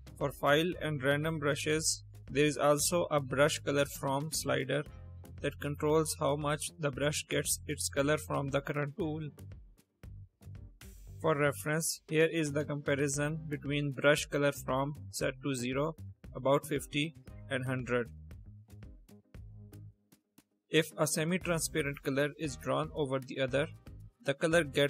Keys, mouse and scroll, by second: 1.4 click, 1.7 click, 3.7-4.4 drag, 5.0 click, 5.5 click, 6.4 click, 7.2 click, 7.9 click, 8.5 click, 8.8 click, 9.8-10.1 drag, 11.6 click, 14.3-14.9 drag, 15.4 click, 16.5 drag, 17.4 click.